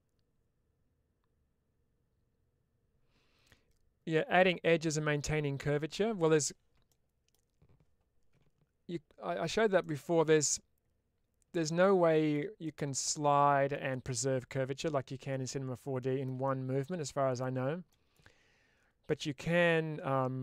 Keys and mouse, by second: 6.8-7.2 middle drag, 9.7 middle click, 12.6-13.7 middle drag, 15.3 middle click, 16.3-17.3 middle drag, 19.0-20.4 middle drag.